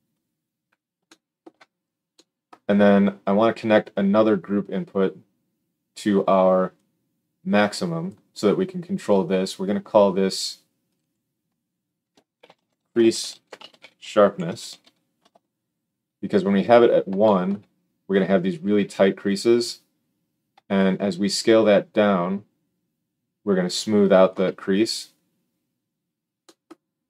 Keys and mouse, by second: 14.7 s.